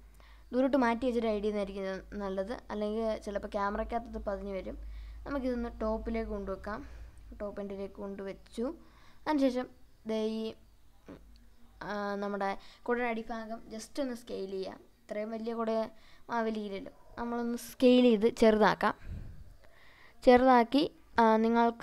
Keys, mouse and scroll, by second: 0.3 click, 1.0 scroll up 2, 2.1 scroll up 1, 2.4-3.0 shift+middle drag, 3.8 g, 4.2 z, 8.9 click, 9.5-11.0 middle drag, 11.0-11.6 scroll down 3, 11.9-12.9 middle drag, 13.9 click, 15.1 s, 16.6 z, 18.4 click, 19.7 click, 20.9 g, 21.4 z.